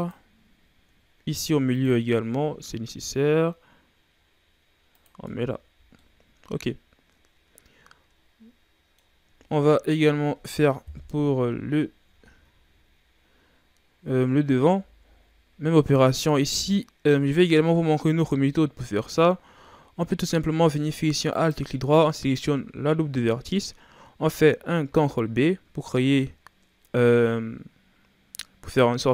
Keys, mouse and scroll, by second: 1.3 ctrl+r, 5.2 Tab, 5.6-6.0 scroll down 1, 6.0-9.0 middle drag, 9.4 shift+scroll down 1, 9.9-10.8 ctrl+scroll down 2, 10.8 ctrl+KP_1, 11.9 ctrl+scroll down 3, 12.2-12.8 shift+scroll up 2, 14.7 Tab, 15.5-17.4 scroll up 3, 17.4-18.0 shift+scroll down 3, 18.0-18.9 ctrl+scroll up 2, 18.9-19.3 scroll down 1, 19.3-21.3 shift+scroll up 2, 21.3 alt+right click, 24.8 ctrl+b.